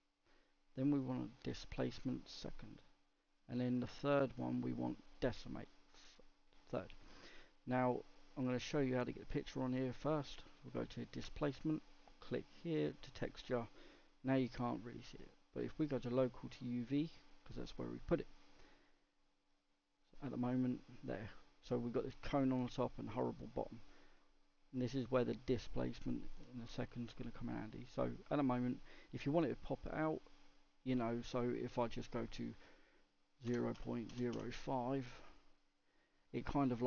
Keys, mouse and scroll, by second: 5.3-6.0 scroll down 3, 6.0-6.6 scroll up 1, 6.6-11.8 middle drag, 11.8-13.7 drag, 13.7-15.1 middle drag, 15.1-17.4 drag, 17.4 middle click, 17.8-18.5 scroll up 2, 18.5-20.1 middle drag, 20.1-22.2 drag, 22.2-35.2 middle drag, 36.2 middle click, 36.7-36.8 scroll up 2.